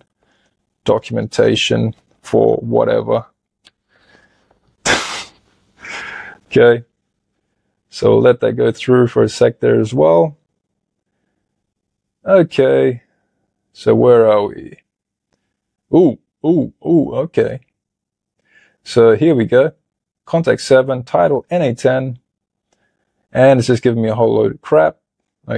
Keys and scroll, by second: 2.2-3.4 typing.